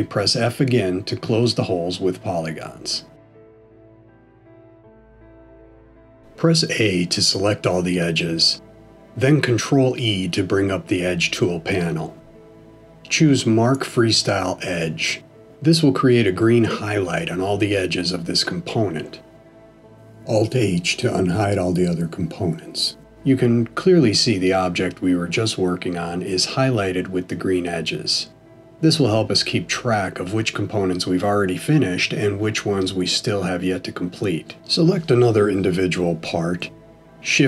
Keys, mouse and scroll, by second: 0.3 f, 1.3 middle click, 6.6 a, 11.5 ctrl+e, 21.5 alt+h, 22.6 click, 23.4 middle click, 30.4 middle click, 35.0 l.